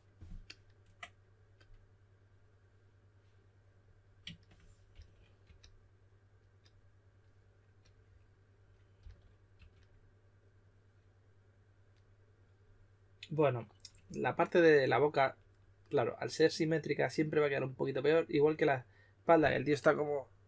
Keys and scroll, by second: 4.9-5.4 typing, 9.0-9.5 typing.